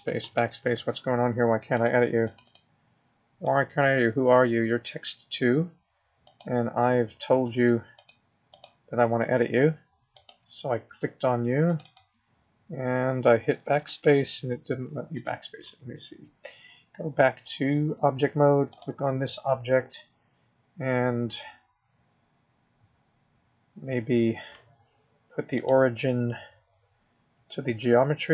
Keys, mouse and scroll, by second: 0.0 BackSpace, 0.2 BackSpace, 1.7 click, 2.2 click, 2.4 click, 3.8-4.5 scroll down 3, 4.5-5.6 scroll down 1, 6.2 click, 8.0 click, 8.5 click, 10.1 click, 11.7 click, 11.8 click, 13.7-14.0 BackSpace, 15.1 click, 17.8 Tab, 18.7 click, 25.5 click.